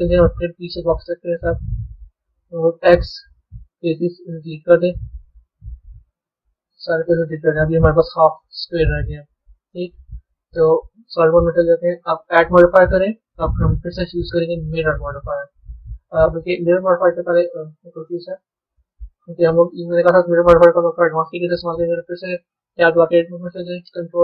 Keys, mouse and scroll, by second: 5.1 click, 6.8-8.7 middle drag, 8.7 Tab, 10.4 z, 12.2-15.3 drag, 16.9 click, 18.3 click, 19.8-22.6 middle drag, 22.6 b.